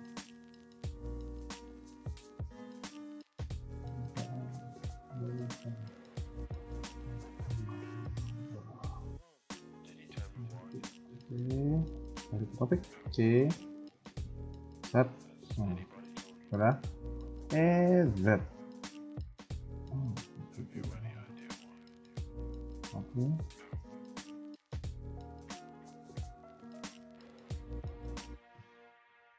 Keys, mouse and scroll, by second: 0.8 c, 2.9 a, 4.2 alt+m, 6.6 Tab, 7.4 middle click, 8.6 KP_1, 9.2 middle click, 9.6 Tab, 9.9 scroll up 1, 10.2 a, 10.4 a, 10.7 c, 12.5 scroll up 1, 12.9 c, 13.6 a, 13.7 a, 13.9 c, 15.4 KP_1, 15.6-16.0 scroll down 3, 16.0 shift+middle click, 16.5-16.8 scroll down 2, 17.3 e, 18.8 scroll up 1, 19.0 middle click, 24.4 KP_1, 24.7 scroll down 2, 25.0 middle click, 25.6 Tab, 26.0 middle click, 26.9 scroll up 2, 27.1 Tab, 27.5 middle click, 28.4 click, 28.8 KP_1, 29.1 Tab.